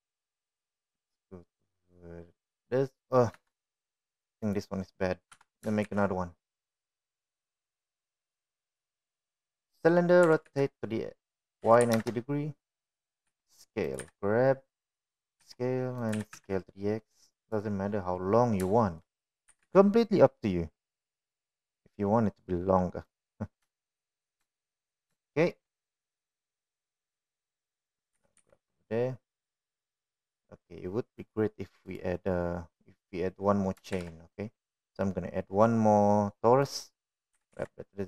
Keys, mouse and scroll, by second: 5.0 KP_1, 7.0 Delete, 7.5 shift+a, 12.0 r, 15.0 s, 15.8 g, 17.2 s, 17.9 s, 21.3 g, 25.5 shift+middle click, 26.3 shift+middle drag, 27.1 shift+middle drag, 29.9 g, 35.7 shift+a.